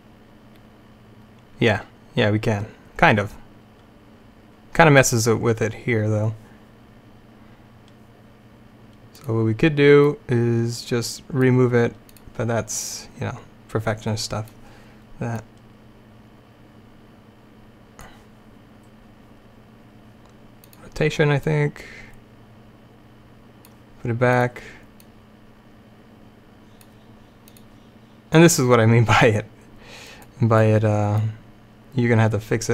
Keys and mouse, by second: 9.3-12.0 drag, 12.2-14.8 drag, 15.5-17.3 drag, 20.8-26.9 drag, 27.6-30.7 drag, 31.3-32.7 drag.